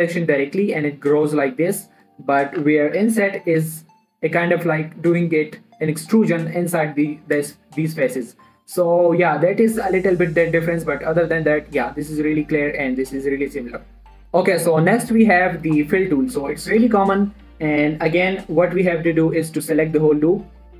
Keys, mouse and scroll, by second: 2.5 right click, 3.0 ctrl+z, 3.9 i, 5.1 click, 8.9 scroll down 1, 9.0 middle click, 10.2 Tab, 10.5 middle click, 12.8 x, 16.6 shift+Num_Lock, 16.6 scroll up 1, 16.7 shift+middle click, 17.2 Tab, 18.6 click, 19.2 scroll up 1, 19.7 alt+shift+click.